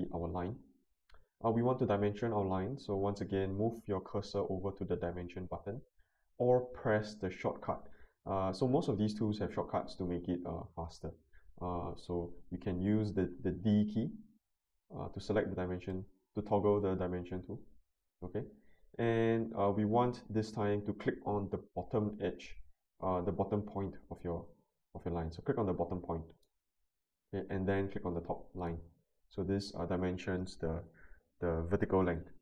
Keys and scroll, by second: 14.4 d, 15.6 d, 15.9 d, 16.5 d, 16.8 d.